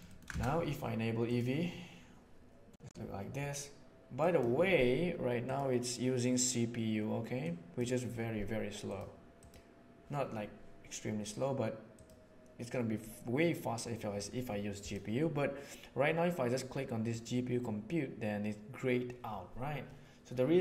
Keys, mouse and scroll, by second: 4.1 drag, 7.4-7.7 drag, 8.9 click, 11.9 click, 14.8-17.2 drag.